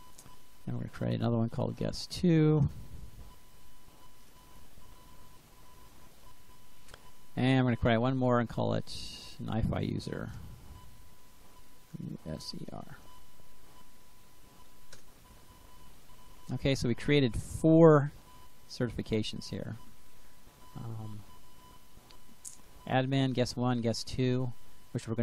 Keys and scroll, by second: 0.3 Up, 0.5 Left, 2.5 BackSpace, 3.1 2, 4.1 Return, 7.4 Up, 7.7 Left, 9.8-13.1 typing, 13.3 Delete, 14.8 Return, 15.6 Return.